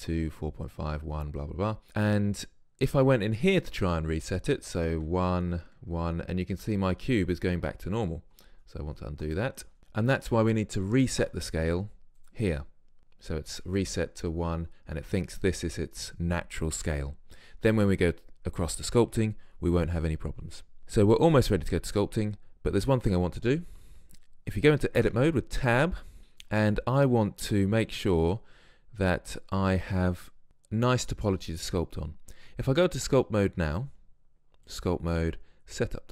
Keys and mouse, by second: 3.6-5.5 drag, 9.7 ctrl+z, 11.2 ctrl+a, 22.0-25.0 middle drag, 25.0 Tab, 27.9-29.6 middle drag, 35.1-36.1 drag.